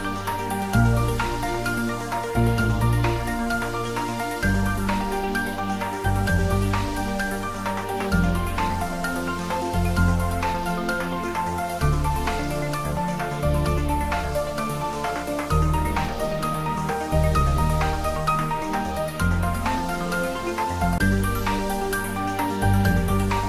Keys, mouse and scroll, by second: 1.5-1.9 scroll up 1, 5.1 shift+click, 11.0 click, 15.3 click, 16.3 click, 17.6 Tab, 18.4-19.4 scroll down 1, 19.4-22.8 middle drag, 22.8-23.4 scroll up 1.